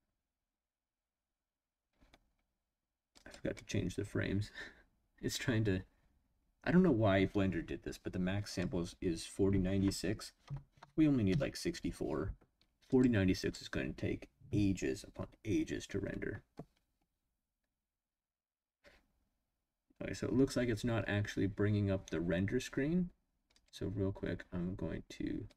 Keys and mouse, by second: 8.4-12.0 drag, 12.9-13.7 drag.